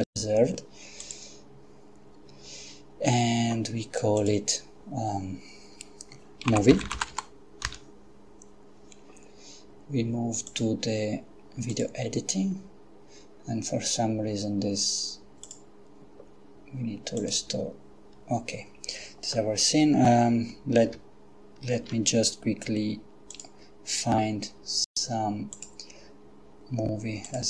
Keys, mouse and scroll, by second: 1.0 click, 4.2 click, 6.5-7.1 typing, 7.7 Return, 10.5 click, 11.7 click, 15.5 click, 17.2 click, 21.8 shift+a, 23.3 click, 25.5 click, 27.2 click.